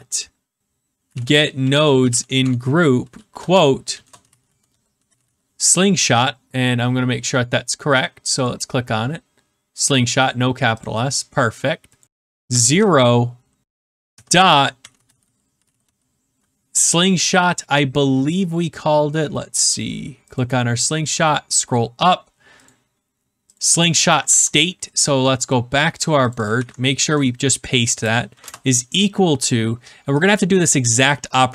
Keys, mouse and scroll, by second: 0.0-6.3 typing, 8.4 click, 10.8 click, 11.8-12.8 typing, 12.0 click, 14.1-16.2 typing, 20.3 click, 21.1-22.4 scroll, 22.6 click, 23.5 click, 24.1 click, 24.2 ctrl+c, 25.4 click, 26.2 click, 26.4 ctrl+click, 26.5 ctrl+v, 28.2 =.